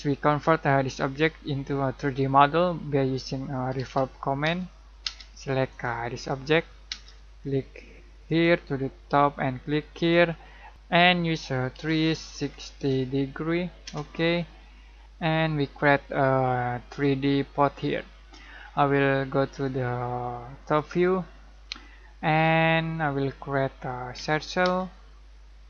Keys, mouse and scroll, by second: 3.4-5.0 typing, 5.7 click, 6.8 space, 8.2 click, 10.7-12.7 typing, 13.8 Return, 15.8-17.5 middle drag, 17.5-18.0 scroll up 1, 18.0-19.4 middle drag, 19.4 click, 21.3-22.4 scroll down 1, 22.4 middle click, 22.9 scroll up 1, 24.1 c, 24.6 space.